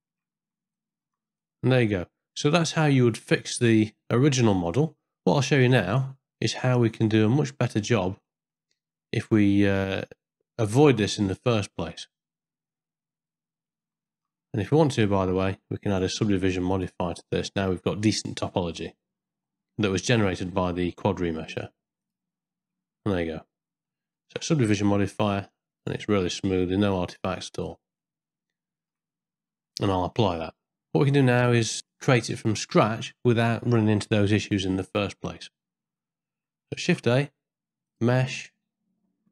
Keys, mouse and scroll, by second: 0.1 Tab, 0.7 ctrl+middle click, 1.4-3.4 middle drag, 3.9 shift+middle click, 4.4-7.2 middle drag, 7.6 shift+middle click, 8.3 middle click, 8.7 ctrl+middle click, 11.6 z, 13.4 z, 14.1 ctrl+middle click, 14.6 click, 15.9 click, 16.9-22.2 drag, 23.1 middle click, 24.2 shift+middle click, 25.8 click, 26.4-27.7 middle drag, 28.0 shift+middle click, 30.0 ctrl+a, 30.7 middle click, 31.3 shift+middle click, 39.0 shift+a.